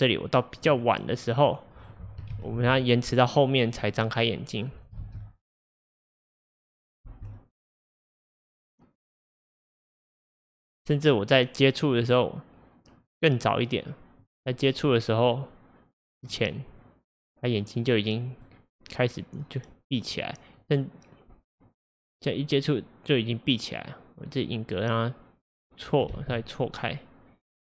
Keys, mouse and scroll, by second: 1.2-2.4 drag, 2.4 shift+d, 4.4 click, 5.0 space, 7.1 space, 7.9-11.0 drag, 13.1-25.1 drag, 26.1 space.